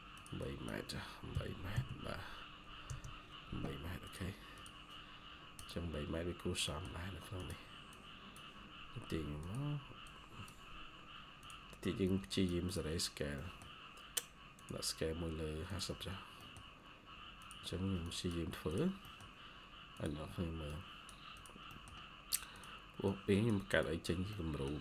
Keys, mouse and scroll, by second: 0.3 double click, 1.2-1.6 typing, 2.8 Return, 5.3-6.5 scroll down 1, 6.6 middle click, 6.7-7.8 scroll up 1, 12.9-13.3 scroll up 1, 13.3 middle click, 16.0 scroll down 1, 16.3 middle click, 16.5-17.7 scroll up 1, 18.9 middle click, 19.4-20.1 scroll up 1, 21.6 middle click, 23.9 scroll down 1, 24.2 middle click.